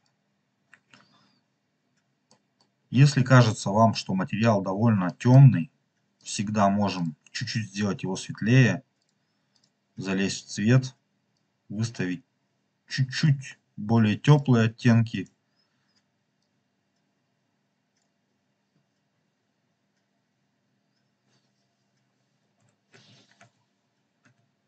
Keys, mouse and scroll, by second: 1.6 scroll down 3, 2.4 middle click, 2.7 scroll down 2, 3.1 middle click, 3.6-4.2 scroll up 3, 4.2-4.8 scroll up 3, 5.0 middle click, 6.1 click, 6.9 click, 8.9-9.5 drag, 14.2 click, 15.1 click, 19.4 scroll up 1, 22.8 ctrl+z, 23.3 ctrl+z, 24.2 ctrl+z.